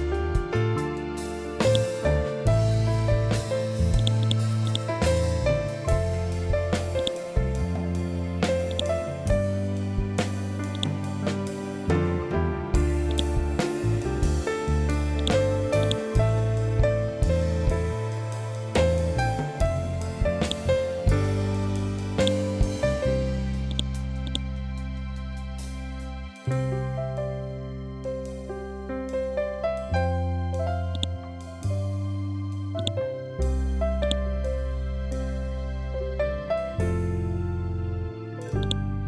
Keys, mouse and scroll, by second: 1.1-14.6 drag, 16.1 scroll down 1, 19.9 click, 23.2 right click, 23.7 click, 24.1 scroll down 1, 30.4-37.9 drag, 38.1-39.0 drag.